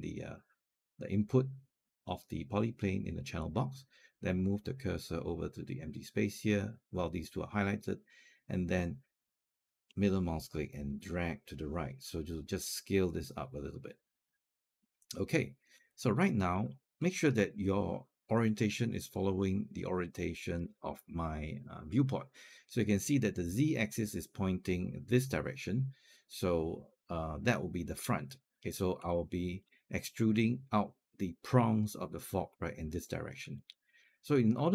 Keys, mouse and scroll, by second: 9.7-15.6 middle drag, 15.7 alt+click, 16.5 scroll down 1, 16.8 alt+middle click, 28.9 alt+click, 33.3 alt+click, 34.6 alt+middle click.